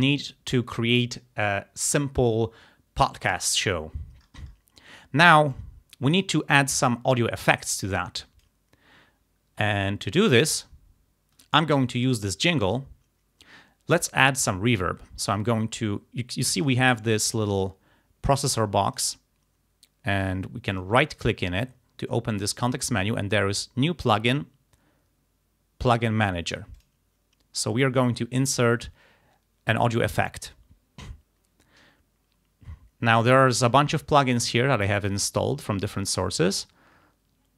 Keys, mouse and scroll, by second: 5.6 click, 8.0 click, 9.9 click, 10.9-11.3 ctrl+scroll up 2, 12.0 click, 19.1 right click, 20.8 click, 21.2 right click, 26.8 click, 28.6 click, 33.2 scroll down 2, 34.3 scroll down 2, 35.5 scroll down 2.